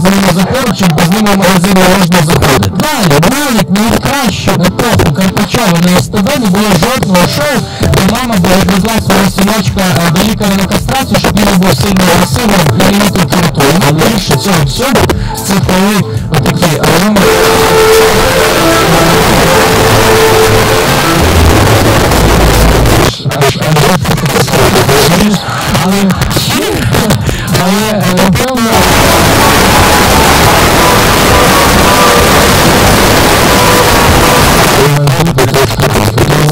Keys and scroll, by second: 23.0 Page_Down, 34.6 Page_Down.